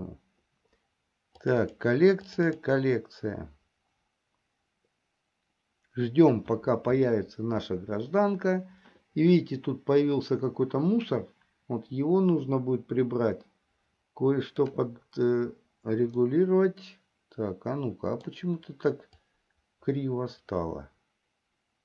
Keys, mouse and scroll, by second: 16.7-19.0 middle drag, 20.1-21.8 drag.